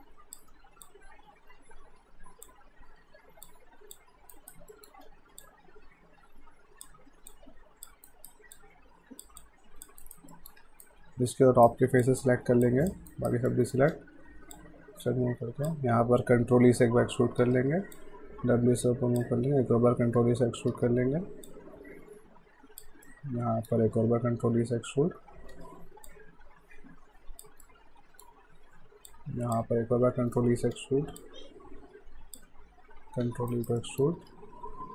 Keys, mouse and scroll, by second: 0.6 w, 0.9 click, 2.9 r, 3.5 click, 4.3 alt+right click, 4.7 alt+middle click, 5.1 w, 5.4 click, 8.1 alt+right click, 8.6 click, 10.0 alt+right click, 10.3 alt+middle click, 10.6 q, 10.8 right click, 12.0 click, 12.7 ctrl+click, 13.1 right click, 13.5 middle click, 13.9 w, 14.5 click, 16.6 e, 18.0 click, 20.2 e, 20.7 w, 21.5 click, 23.1 alt+middle click, 25.0 e, 26.1 click, 27.7 alt+middle click, 29.1 click, 30.1 e, 31.2 click, 33.1-34.9 typing, 33.5 right click, 33.8 middle click.